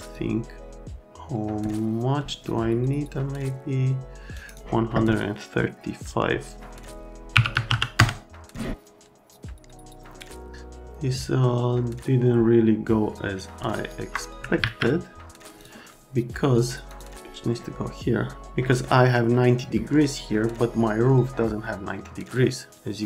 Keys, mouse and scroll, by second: 0.1 click, 7.3 KP_1, 7.5 KP_3, 7.7 KP_5, 8.0 KP_Enter, 13.7 ctrl+click, 15.6 click, 16.8 click.